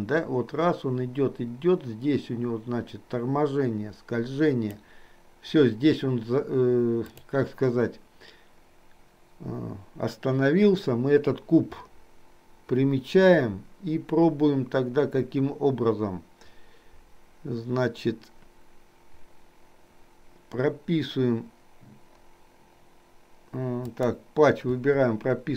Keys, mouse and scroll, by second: 7.2 click, 23.9 click, 24.9 i.